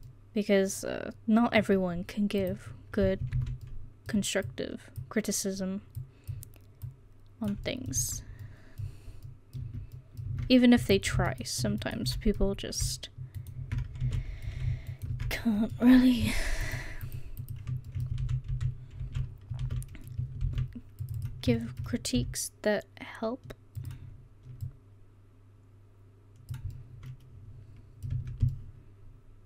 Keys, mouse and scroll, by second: 2.2 middle click, 3.4 ctrl+z, 3.7 middle click, 4.5 middle click, 4.5 click, 6.9 click, 7.7 middle click, 8.0 Tab, 8.2-8.8 middle drag, 9.6 Tab, 10.3 Tab, 10.8 Tab, 12.6-15.3 middle drag, 14.1 ctrl+z, 16.6 click, 17.9-19.6 middle drag, 18.2 ctrl+z, 18.5 ctrl+z, 19.0 ctrl+z, 19.6 ctrl+z, 20.4 ctrl+r, 22.2 s, 26.8 middle click, 28.2 Tab.